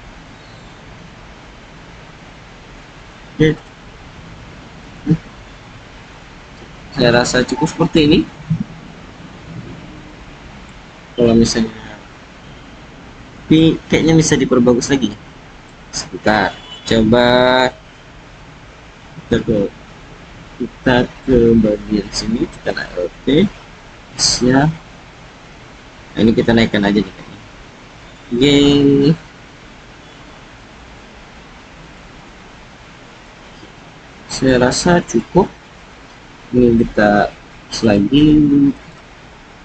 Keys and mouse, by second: 2.9-3.6 drag, 4.3 alt+z, 5.6 Tab, 6.1 click, 7.1-7.4 drag, 8.0-10.6 drag, 14.0-14.8 drag, 15.1 click, 19.3 Tab, 22.7 alt+click, 23.8 s, 28.0 g, 28.9 z, 31.8 click, 32.3 click, 33.7-34.4 drag, 35.0 click, 36.7-37.9 drag, 38.8 click.